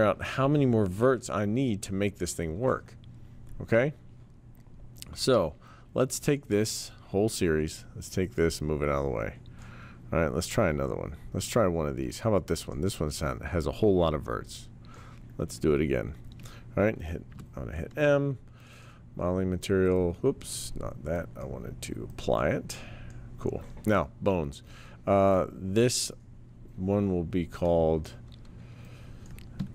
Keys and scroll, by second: 7.4 w, 17.3 m.